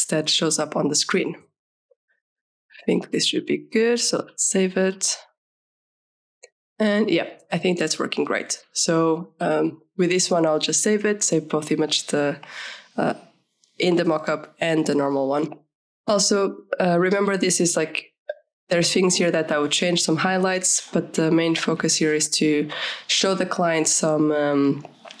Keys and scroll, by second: 5.1 ctrl+s, 16.3 ctrl+=.